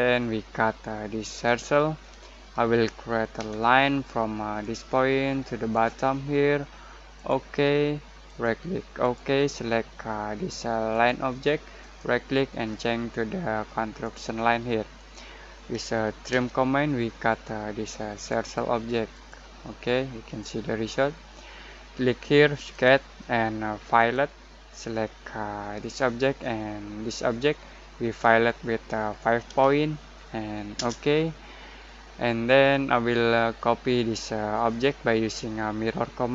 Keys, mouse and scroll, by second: 0.3 click, 3.3 l, 4.6 click, 8.2 right click, 9.0 click, 11.8 right click, 14.0 click, 16.3 t, 18.1 click, 22.7 click, 25.3 click, 27.2 click, 29.4 typing, 30.7 Return.